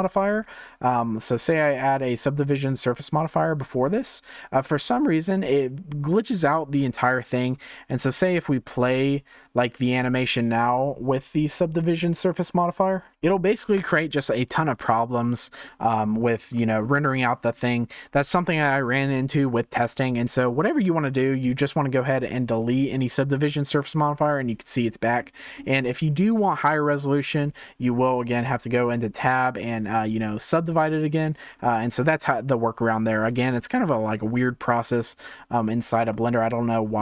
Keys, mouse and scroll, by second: 0.0-1.9 middle drag, 1.9-3.9 drag, 4.8-11.7 drag, 13.1-15.5 drag, 15.5-16.5 scroll up 1, 16.5-22.6 shift+middle drag, 22.6-25.1 drag, 25.1-28.8 shift+middle drag, 28.8 Tab, 29.9-31.1 right drag, 31.1 Tab, 35.6-36.1 scroll down 1, 36.1-37.0 shift+middle drag.